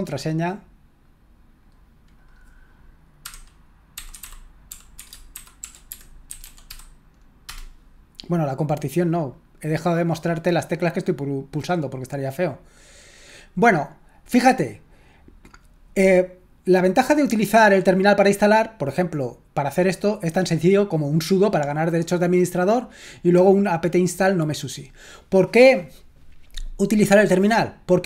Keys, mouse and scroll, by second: 0.4 right click, 1.6 click, 12.8 click, 17.5-22.2 drag.